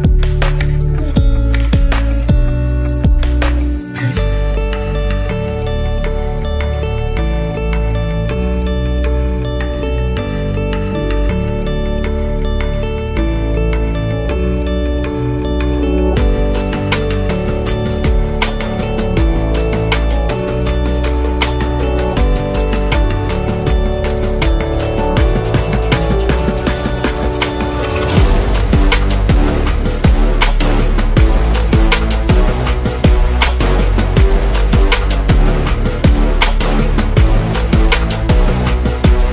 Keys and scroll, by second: 0.0-1.1 typing, 4.5 i, 5.4 space, 7.3 space, 8.7-11.5 typing, 12.2 super+-, 13.5 space, 17.2-18.9 typing, 24.7-25.3 typing, 26.6 space, 30.1-30.6 typing, 34.3 typing, 37.3 5, 37.5 Return.